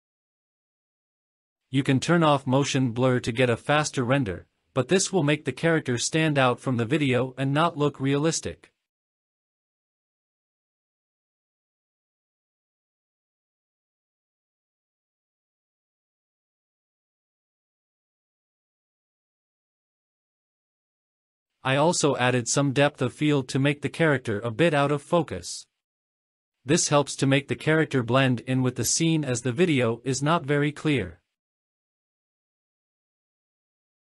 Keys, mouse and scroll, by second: 3.8 click, 4.6 click, 4.9-6.9 scroll down 6, 6.9 click, 8.6 F12, 24.8-25.2 scroll down 4, 24.8 middle click, 25.1 middle click, 25.3 scroll up 1, 25.5 shift+a, 26.9 shift+click, 27.6 scroll up 1, 27.7 scroll down 1, 28.2 click, 28.7 scroll down 2, 28.8 middle click, 29.0 shift+middle click, 29.5-31.5 typing, 29.8 click, 30.4 click, 30.9-31.5 scroll up 4, 31.1 shift+middle click, 31.6 click, 31.7 middle click, 31.7-32.4 scroll down 4, 32.0 shift+middle click, 32.4 scroll up 1, 33.0 click.